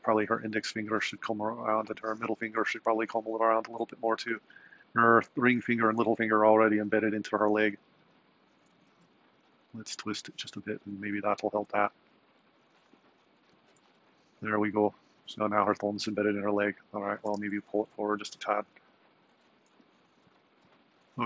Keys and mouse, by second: 9.0 r, 11.8 r, 13.0 r, 17.1 g.